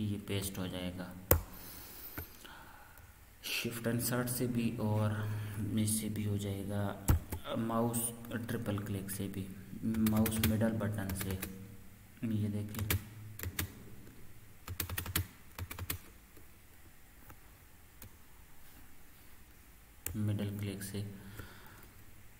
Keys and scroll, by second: 1.3 BackSpace, 1.9 BackSpace.